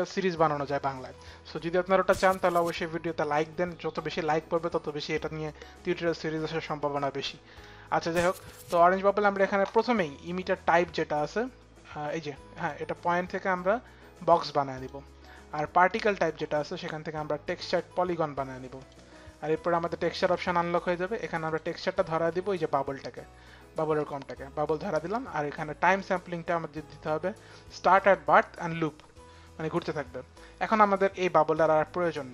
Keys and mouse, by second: 12.2 click, 14.4 click, 15.5 click, 16.3 click, 17.3 click, 18.4 click, 19.9 click, 21.5 click, 24.1 click, 25.6 click, 27.8 click, 30.3 click, 31.2 click.